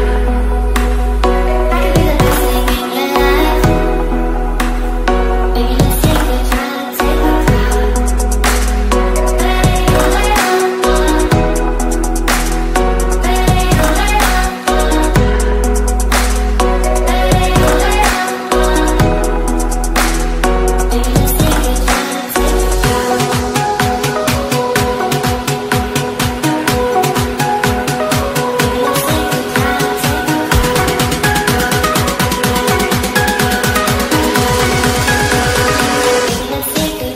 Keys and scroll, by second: 9.8 ctrl+r, 10.6 ctrl+c, 11.2 ctrl+v, 21.5 ctrl+g, 31.1 ctrl+space.